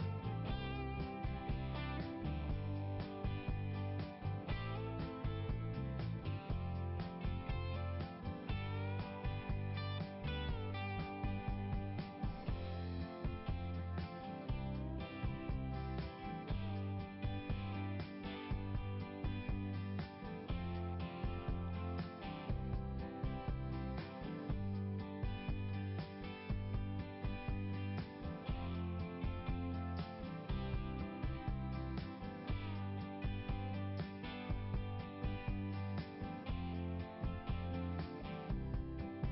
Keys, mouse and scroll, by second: 0.1 click, 3.7 scroll down 1, 4.2-4.6 scroll down 1, 6.4 click, 8.4 click, 8.6 click, 12.8 click, 14.5 click, 17.3 click, 18.2 click, 19.9 click, 25.5 click, 25.9 click, 26.2 click, 30.9 click, 34.3 click, 34.8 click, 37.0 click, 37.2 click, 37.5 click, 38.6 click.